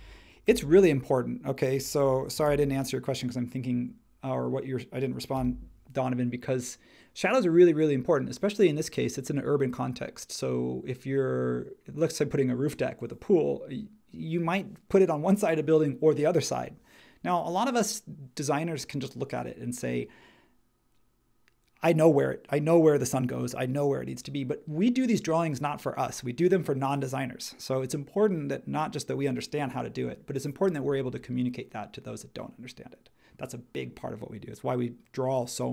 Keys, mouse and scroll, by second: 0.0-2.8 typing, 5.3 Return.